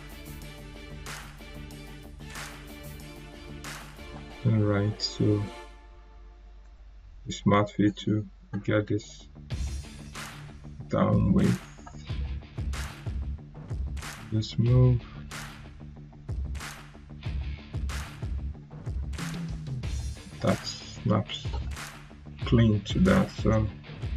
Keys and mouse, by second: 4.2 right click, 5.3 click, 9.9 right click, 11.3-19.6 drag, 23.4-24.0 click.